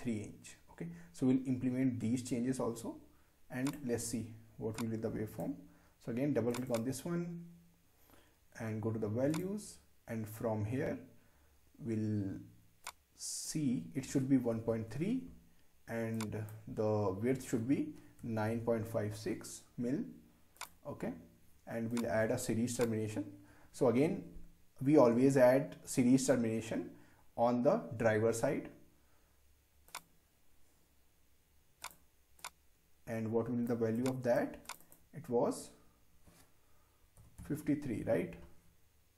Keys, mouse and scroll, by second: 9.4 click, 12.9-16.0 drag, 16.1-19.0 drag, 20.5 click, 29.9-34.7 drag.